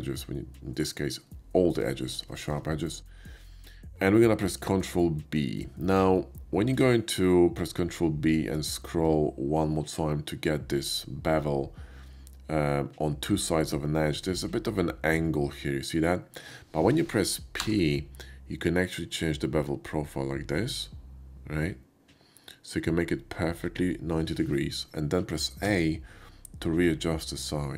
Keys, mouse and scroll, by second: 2.3 shift+middle click, 4.5 ctrl+b, 5.0 ctrl+shift+b, 11.2-15.3 middle drag, 17.6 p, 23.3-25.7 middle drag, 25.7 a.